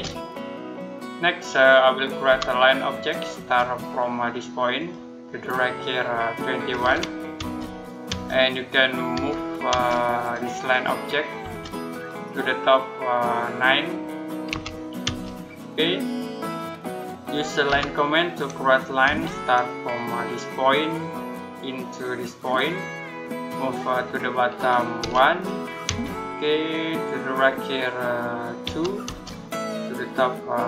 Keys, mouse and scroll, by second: 0.2 middle click, 2.1 l, 3.2 space, 4.6 click, 6.3-7.2 typing, 9.0 m, 9.5 space, 10.0 click, 11.3 space, 11.7 click, 14.3 9, 14.9 space, 17.5 l, 18.9 space, 20.5 click, 24.8 1, 25.7 space, 28.9 space.